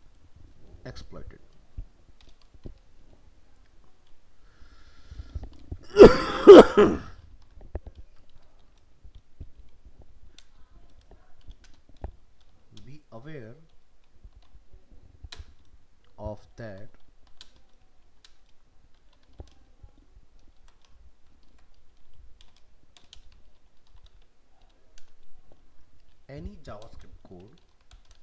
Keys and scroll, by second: 20.6 ctrl+z.